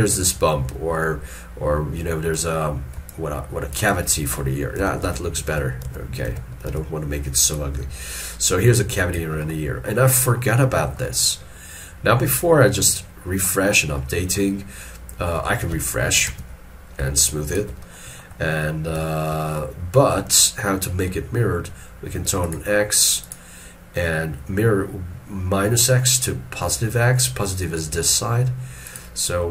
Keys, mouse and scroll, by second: 3.2 ctrl+click, 4.0 ctrl+click, 7.6 ctrl+click, 8.7 ctrl+click, 9.6 middle click, 16.4 ctrl+r, 17.3 shift+click, 18.1 middle click, 18.5-19.0 scroll down 1, 19.2 shift+middle click, 19.5 shift+middle click.